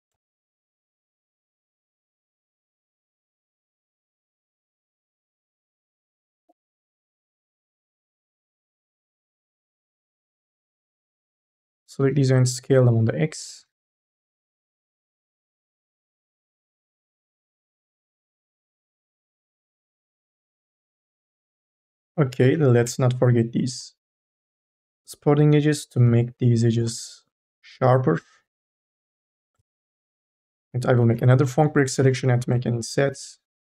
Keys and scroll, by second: 5.3 q, 9.9 1, 10.0 space, 12.5 t, 13.8 ctrl+z, 15.1 ctrl+z, 16.8 q, 21.6 ctrl+z, 22.2 k, 22.6 l, 24.8 q, 28.3 q, 29.7 q, 30.9-33.6 typing.